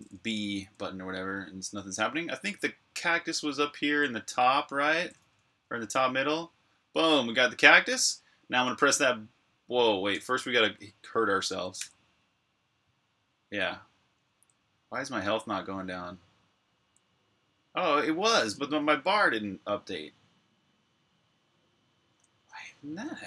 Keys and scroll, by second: 0.0-0.4 typing, 2.2-6.4 typing, 8.6-9.4 typing, 11.6 1, 14.0-15.0 typing, 16.6 1, 18.3 j, 21.8-22.7 typing.